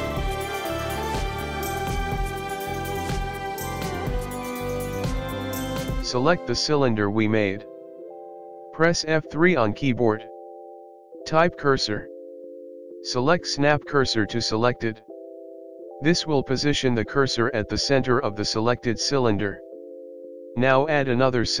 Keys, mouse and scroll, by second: 0.2 Tab, 0.5 click, 0.5 middle click, 0.8 click, 0.8 click, 1.7 right click, 1.8 click, 2.3-2.7 scroll up 1, 2.7 middle click, 3.8-4.3 scroll down 4, 4.0 middle click, 4.5 middle click, 4.7-5.1 scroll down 2, 5.1 middle click, 6.2 KP_1, 6.5 scroll up 2, 6.5 shift+middle click, 7.3 scroll up 1, 7.6 click, 9.2 F3, 19.2 a, 21.5 click.